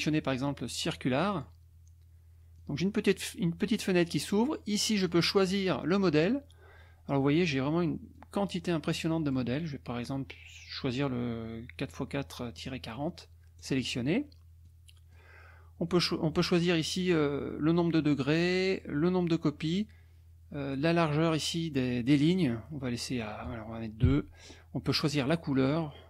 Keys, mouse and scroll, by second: 1.3 click, 2.6-4.0 drag, 5.0 click, 8.2-9.5 drag, 12.6 click, 12.9 middle click, 13.6 click, 14.6 click, 17.8 click, 23.2 click, 24.0 KP_2, 25.0 click.